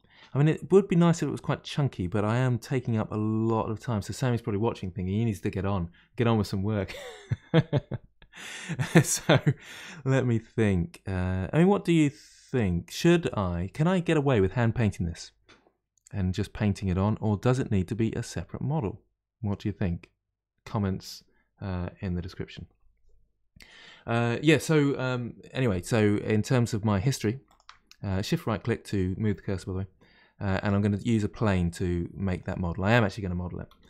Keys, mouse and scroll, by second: 9.6-12.6 middle drag, 14.6-16.0 middle drag, 16.0-17.8 scroll up 1, 17.8-19.0 scroll up 1, 25.7-27.4 middle drag, 27.4-28.0 shift+right drag, 28.0-30.5 middle drag, 30.5 shift+a, 33.6 s.